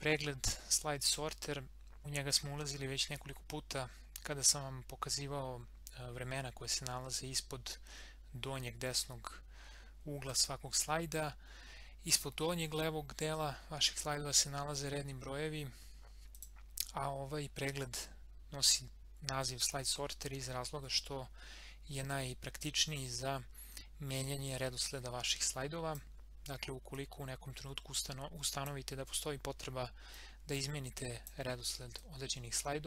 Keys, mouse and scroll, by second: 16.3 click, 24.6-32.8 drag.